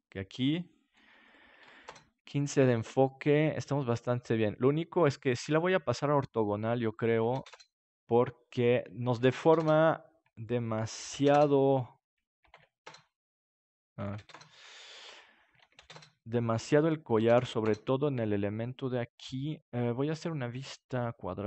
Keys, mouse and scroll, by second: 0.5 click, 9.3 KP_0, 12.8-21.4 drag, 17.3 KP_0.